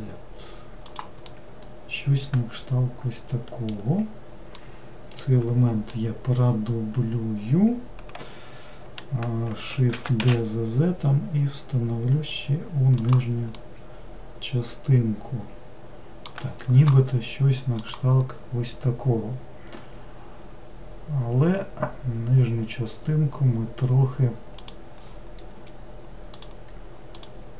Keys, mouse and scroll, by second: 1.2-4.3 middle drag, 4.6-9.0 middle drag, 9.9 shift+d, 13.5-16.6 middle drag, 26.3 click, 27.1 click.